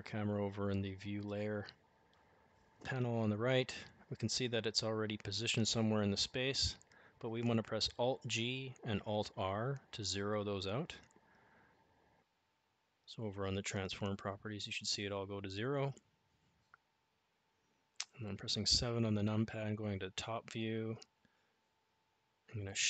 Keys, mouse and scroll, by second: 0.1 click, 6.0 alt+g, 7.6 alt+r, 16.6 KP_7, 18.7-19.2 shift+middle drag, 19.4 shift+middle click, 21.5 shift+a.